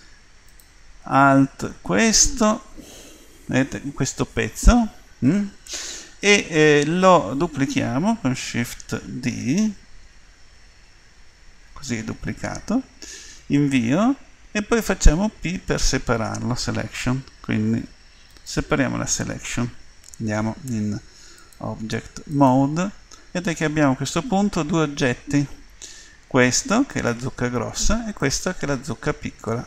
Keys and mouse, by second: 0.5-8.8 drag, 2.0-3.5 right drag, 11.2 shift+d, 15.4 p, 20.9 middle click, 21.4-26.9 drag, 26.9-29.6 right drag.